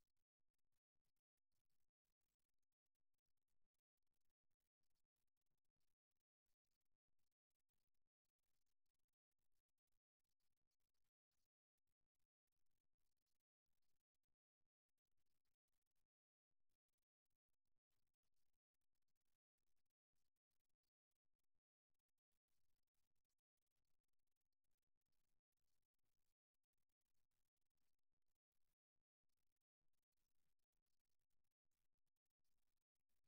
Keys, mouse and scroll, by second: 1.1-2.6 drag, 2.6-6.9 middle drag, 5.1 click, 8.9-10.9 middle drag, 10.9 ctrl+z, 11.9-14.1 middle drag, 15.5-19.1 drag, 20.5-25.1 middle drag, 22.4 click, 26.1-30.1 middle drag, 30.7-32.8 middle drag.